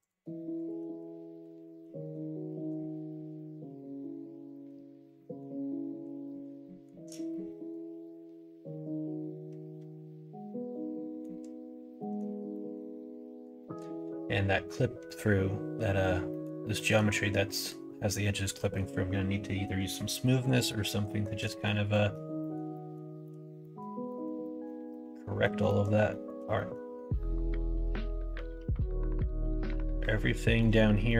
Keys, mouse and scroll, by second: 0.0 click, 0.5 shift+click, 1.4 f, 1.7 middle click, 2.4 middle click, 3.0-4.6 middle drag, 5.1 middle click, 5.5 middle click, 6.2 middle click, 6.6 shift+middle click, 7.2-11.1 middle drag, 11.9 middle click, 12.5 middle click, 13.2 middle click, 13.5 middle click, 16.2 middle click, 16.7 middle click, 17.5 middle click, 18.5 middle click, 20.2 middle click, 20.6 middle click, 21.0 shift+middle click, 21.4 middle click, 21.9 middle click, 22.3 middle click, 22.7 shift+middle click, 23.2 shift+middle click, 23.5 middle click, 24.0 middle click, 24.3 middle click, 24.8 middle click, 25.4 middle click, 25.6 middle click, 26.0 shift+middle click, 26.5 middle click, 27.0-30.5 middle drag, 31.0 middle click.